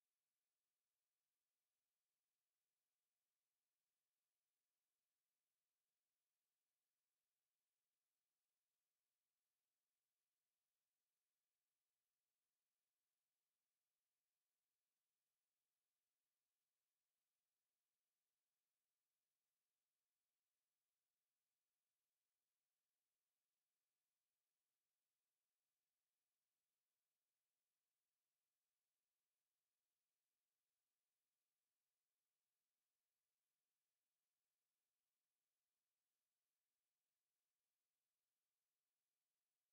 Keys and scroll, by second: 33.7 ctrl+c, 35.8 ctrl+v.